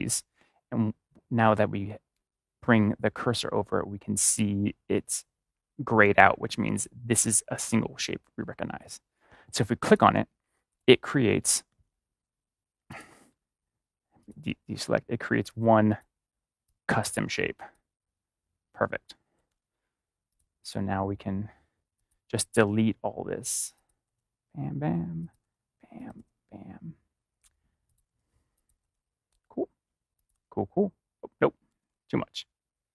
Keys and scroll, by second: 19.4 ctrl+z, 22.5 BackSpace, 23.9 BackSpace, 25.3 BackSpace, 26.1 BackSpace, 28.0 BackSpace, 28.8 BackSpace, 30.3 BackSpace, 31.7 ctrl+z.